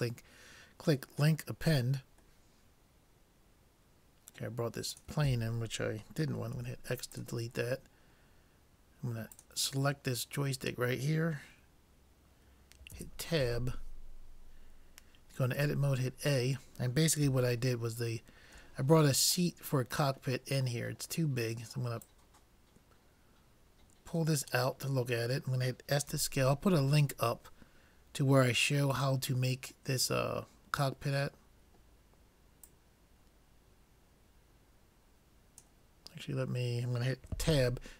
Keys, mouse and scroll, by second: 0.0-1.7 drag, 2.6-4.3 middle drag, 4.9-6.5 drag, 6.5 x, 9.4-11.1 drag, 13.0 Tab, 15.6 a, 17.8-20.0 middle drag, 20.0-20.5 scroll up 1, 20.5 middle click, 22.1-23.8 drag, 26.1 s, 30.1-31.9 middle drag, 32.7-34.7 drag, 37.5 Tab.